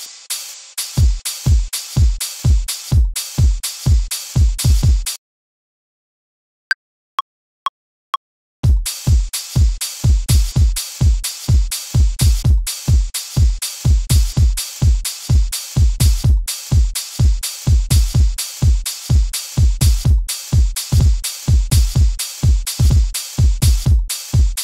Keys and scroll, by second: 0.9 a, 5.1 space, 8.5 a, 15.1 super+a, 15.4 super+u, 20.9 a, 22.7 a.